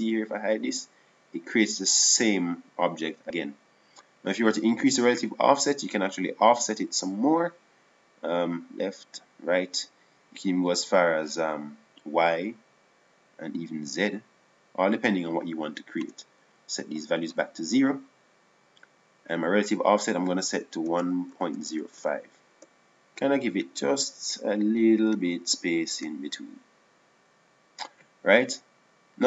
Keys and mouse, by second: 0.4-3.0 drag, 6.6-7.9 drag, 12.2-17.2 drag.